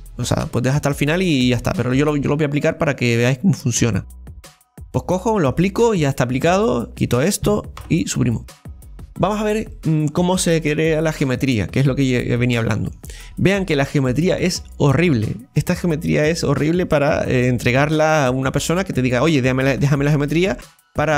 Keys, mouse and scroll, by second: 0.2 click, 1.5-4.5 right drag, 5.5-6.7 drag, 6.7-7.8 right drag, 7.8 Delete, 8.2 scroll up 2, 8.6-11.1 middle drag, 11.1 Tab, 11.1 right click, 11.7 Tab, 12.4-17.2 middle drag.